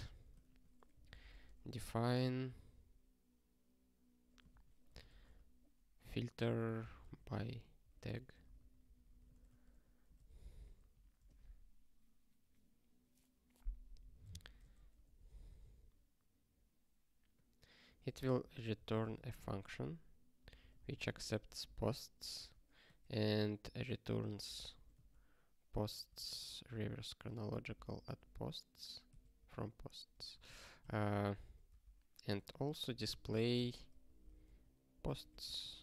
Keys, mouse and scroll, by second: 0.0 Return, 0.2-1.9 typing, 4.2-11.1 typing, 8.6 alt+b, 10.4 alt+f, 14.1-15.0 typing, 15.5 Return, 17.6-21.4 typing, 21.6 Return, 22.3 Return, 23.0 (, 24.2-25.4 typing, 26.2 ctrl+n, 26.7 Return, 27.2-28.5 typing, 29.4 ctrl+g, 30.1 ctrl+p, 30.4 ctrl+n, 31.1 ctrl+p, 31.7 Tab, 32.1-35.8 typing.